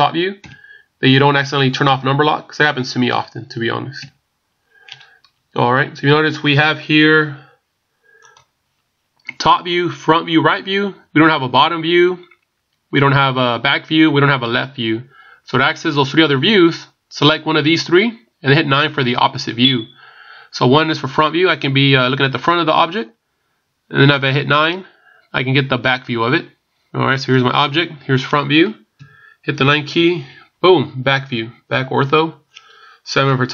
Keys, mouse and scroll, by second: 0.4 KP_7, 1.8 KP_7, 3.1 KP_Subtract, 4.0 KP_1, 5.6-6.1 scroll up 4, 6.6-7.1 scroll up 2, 27.3 click, 28.9 KP_1, 29.9 KP_9, 33.3 KP_7.